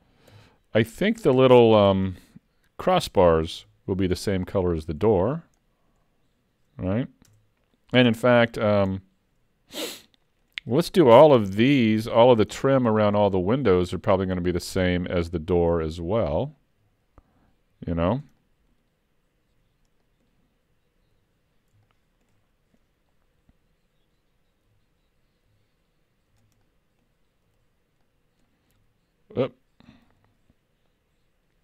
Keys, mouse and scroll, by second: 0.3 KP_Decimal, 1.1-1.4 scroll up 3, 1.4 shift+middle click, 1.8 middle click, 3.6 l, 4.2 scroll down 4, 4.7 middle click, 5.6 middle click, 7.3 Tab, 8.1 Tab, 9.0 middle click, 11.5 l, 12.3 l, 12.6 middle click, 13.2 l, 14.1 l, 14.9 middle click, 16.0 l, 16.8 l, 17.8 l, 18.4 middle click, 19.5 l, 20.1 middle click, 21.1 l, 21.9 shift+middle click, 22.5 scroll up 2, 24.7 l, 25.5 l, 26.3 l, 26.6 middle click, 27.6 l, 28.0 middle click, 28.8 l, 30.1 ctrl+z.